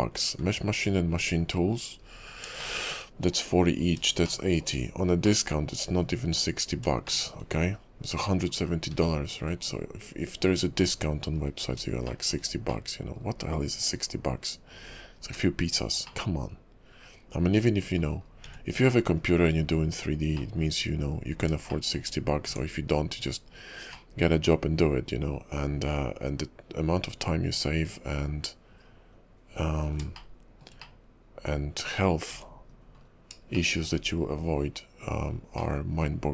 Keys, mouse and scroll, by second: 1.2 scroll down 2, 1.2 `, 1.5 KP_5, 2.1 scroll up 4, 2.7 shift+middle click, 4.4 shift+middle click, 4.9 scroll up 2, 5.4 middle click, 6.0 KP_5, 7.2 middle click, 7.6-8.2 scroll up 3, 8.6 scroll down 3, 8.9 `, 9.4 KP_5, 9.9-11.5 scroll down 2, 11.5-11.9 scroll up 6, 12.2 shift+middle click, 12.8 middle click, 14.0 KP_5, 15.4-15.7 scroll up 2, 16.2 middle click, 18.2-19.0 scroll down 7, 19.1 KP_5, 19.8-20.5 scroll up 4, 20.5 middle click, 20.9 KP_5, 21.5-21.8 scroll up 2, 21.8 shift+middle click, 22.4 Tab, 24.1 middle click, 30.3 shift+middle click, 30.9 middle click, 32.3 `, 32.7 KP_5, 33.1 scroll down 3, 33.7 shift+middle click, 34.1 scroll up 4, 35.7 middle click.